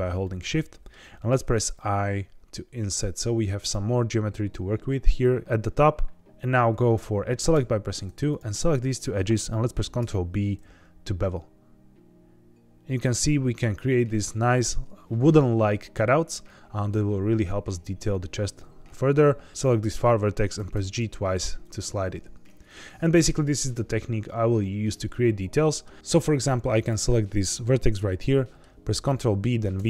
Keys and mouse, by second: 0.2 middle click, 1.2 i, 3.6 click, 4.9 middle click, 7.5 2, 8.2 click, 8.8 shift+click, 9.8 ctrl+b, 12.9 click, 18.9 1, 20.5 g, 20.7 g, 21.6 click, 22.3 middle click, 22.8 middle click, 25.6 middle click, 26.7 click, 28.1 middle click, 28.9 ctrl+b, 29.7 v.